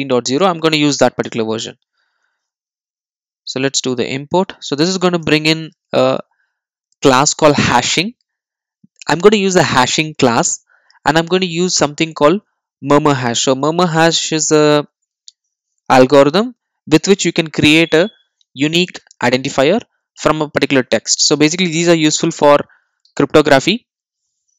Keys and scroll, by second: 5.0 super+e.